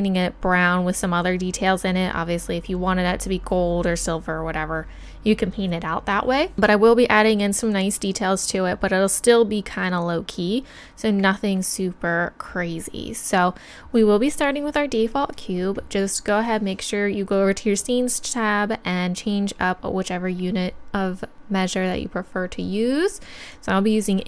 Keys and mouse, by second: 21.3-22.8 drag.